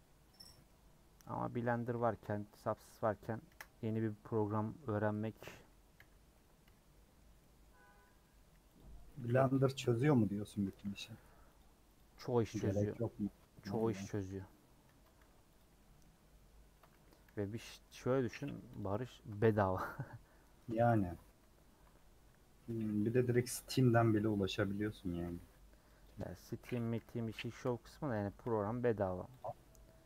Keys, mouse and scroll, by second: 3.5 KP_Decimal, 4.4 middle click, 5.2 middle click, 5.9 /, 6.3-8.7 middle drag, 8.7 click, 9.2-10.5 middle drag, 10.5 a, 12.0 u, 12.8-14.2 middle drag, 14.2 /, 14.8 Tab, 15.2 h, 15.6 click, 15.8 middle click, 16.1 Tab, 17.3 /, 17.6 middle click, 17.8 scroll down 2, 18.0 middle click, 18.8 click, 19.9-23.2 middle drag, 23.2 ctrl+r, 23.9 middle click, 25.1 a, 26.0 u, 27.6 /, 28.1 Tab, 28.5 h, 28.9 scroll down 2, 29.4 Left.